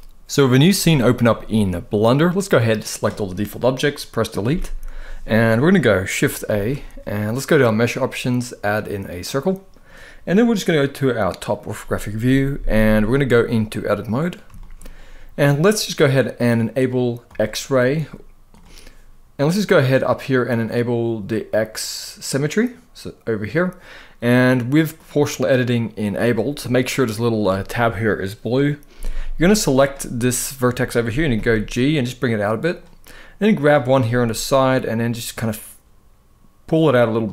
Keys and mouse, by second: 2.0-2.7 drag, 4.2 Delete, 5.2-5.5 middle drag, 6.2 shift+a, 11.9 KP_7, 13.4 click, 14.3 shift+middle click, 16.9 click, 18.2 click, 22.2 click, 24.6 click, 25.7 click, 29.5 click, 31.0 g, 32.3 click, 33.3 click, 33.7 g, 36.3 click, 36.9 click.